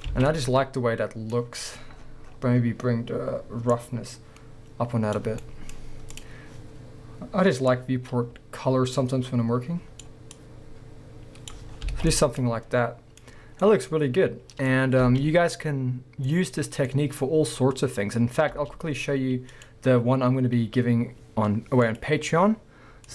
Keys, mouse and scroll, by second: 0.1 alt+a, 1.7-3.7 scroll down 2, 3.7-5.4 drag, 5.4 middle click, 5.8-6.2 scroll up 2, 6.2 click, 7.7-12.3 drag, 11.7 scroll down 1, 11.9 alt+a, 12.3-13.1 middle drag, 13.3 scroll up 1, 13.6 middle click, 14.7-15.0 scroll down 1, 15.0 space, 15.9-16.3 middle drag, 18.7 space.